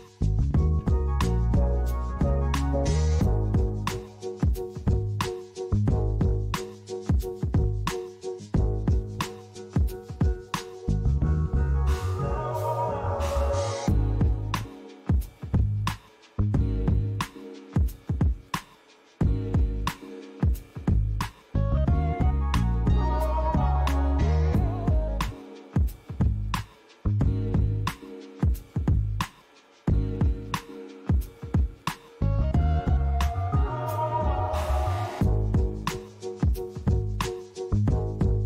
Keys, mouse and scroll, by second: 3.6 click, 5.5 click, 6.4 click, 7.5 click, 12.5 typing, 12.8 click, 13.9 click, 14.8 click, 19.8 l, 24.2-24.7 scroll down 4, 25.8 click, 31.5 click, 33.3 click, 34.3 click, 35.3 click.